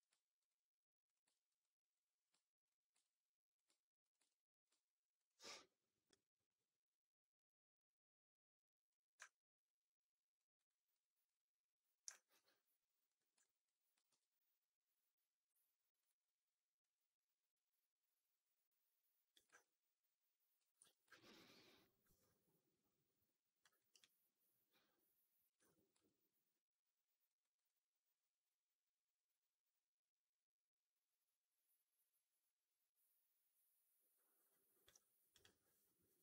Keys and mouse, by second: 1.2 alt+middle click, 1.5 alt+click, 2.5 shift+click, 2.9 alt+click, 4.2 alt+click, 5.1 shift+click, 9.1-10.2 alt+drag, 10.4 alt+right click, 10.8 alt+click, 12.0 alt+click, 13.0 click, 13.3 alt+click, 13.9 shift+s, 16.6-19.2 drag, 19.5 alt+click, 21.0 4, 21.0 right drag, 21.3-23.5 alt+drag, 23.7 alt+right click, 23.9-25.3 alt+drag, 25.9-27.2 alt+drag, 27.3 alt+right click, 27.5-34.7 alt+drag, 35.2 click.